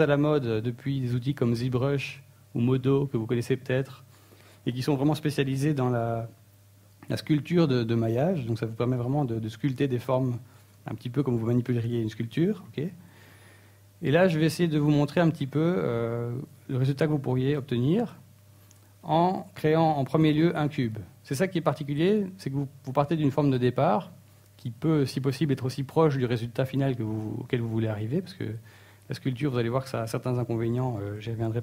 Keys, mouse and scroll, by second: 9.9 click.